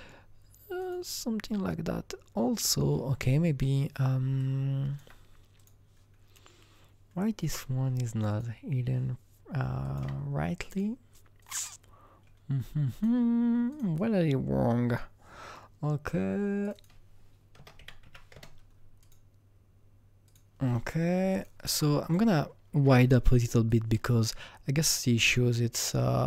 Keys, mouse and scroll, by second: 0.8 click, 2.6 click, 4.3-8.1 alt+drag, 8.2-9.8 drag, 9.8 alt+click, 10.7 alt+click, 11.4 alt+click, 16.7 double click, 17.5 KP_0, 17.7 KP_Decimal, 18.0 KP_1, 18.3 KP_Enter, 19.0 click, 20.2 click, 21.3 alt+right click, 21.5 alt+double right click, 22.0 click, 22.8 r, 23.6-26.2 drag, 26.1 alt+right click.